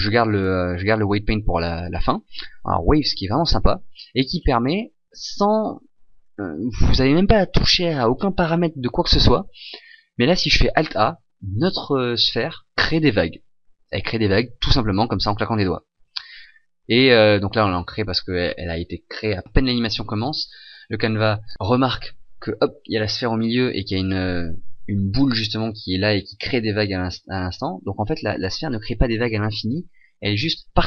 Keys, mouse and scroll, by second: 4.4 scroll, 4.9 scroll down 3, 10.8 alt+a.